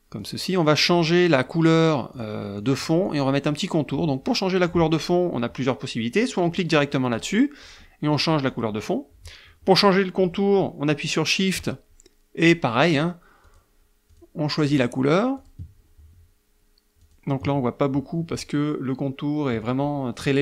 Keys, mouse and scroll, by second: 0.3 click, 2.2 click, 2.7 click, 3.1 click, 7.2 click, 7.7 click, 8.2 click, 8.5 click, 12.5 shift+click, 12.9 shift+click, 13.5 shift+click, 14.1 shift+click, 15.4 shift+click, 17.0 shift+click, 19.7 shift+click.